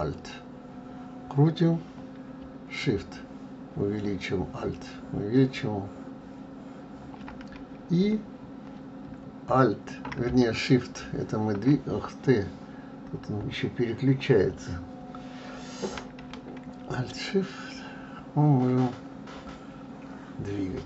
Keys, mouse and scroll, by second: 3.2-6.2 ctrl+middle drag, 17.8-20.8 shift+middle drag.